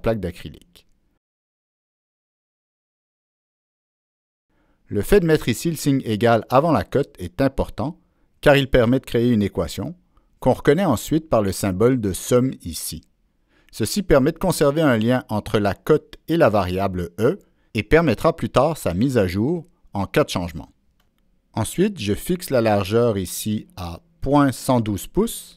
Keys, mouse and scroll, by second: 0.6 Return, 2.6 click, 2.7 Return, 3.6 middle click, 4.5 Escape, 5.6-7.1 drag, 8.4-8.9 drag, 9.5-10.0 scroll down 1, 10.0-10.5 scroll down 1, 11.0 click, 12.8 click, 14.1 right click, 15.5 right click, 22.0 click, 22.9 click, 23.5 click.